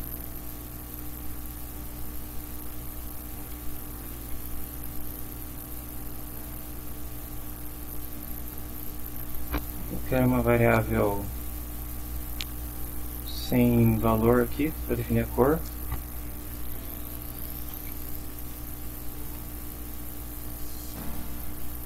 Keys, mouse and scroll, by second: 1.0 space, 2.1 BackSpace, 3.2-5.8 typing, 7.7 r, 8.5 ;, 16.4 Return, 17.1-19.7 typing.